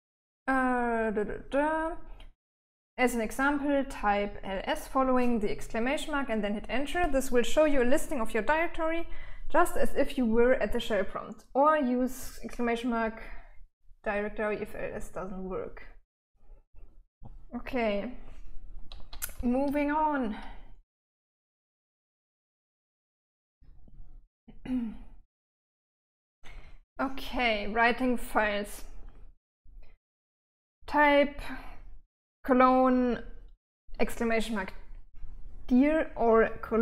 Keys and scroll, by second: 19.9 j, 20.4-20.7 j, 20.9 j, 24.0-25.2 j, 25.6 j, 25.9 j.